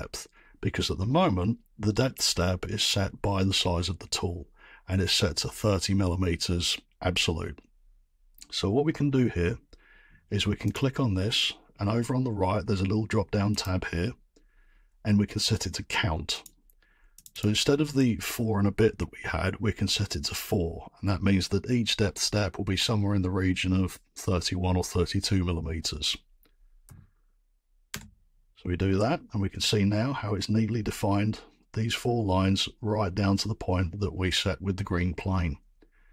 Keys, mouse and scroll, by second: 10.7 click, 13.6 click, 16.4 click, 17.2 click, 17.4 click, 26.8 4, 27.9 Return.